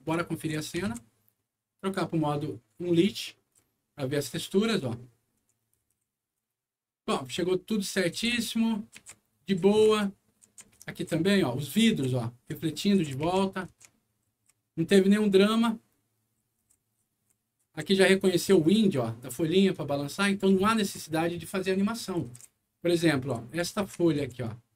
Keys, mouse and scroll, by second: 0.0 alt+right click, 0.9 alt+w, 1.8 alt+click, 2.9 alt+click, 3.5-18.3 alt+right drag, 4.1-4.6 scroll up 2, 5.0 d, 7.9-9.6 typing, 10.8 d, 11.0 a, 12.9 e, 13.2 d, 14.3 a, 16.6 w, 19.7-24.4 right drag, 20.6 a, 21.9-24.5 typing.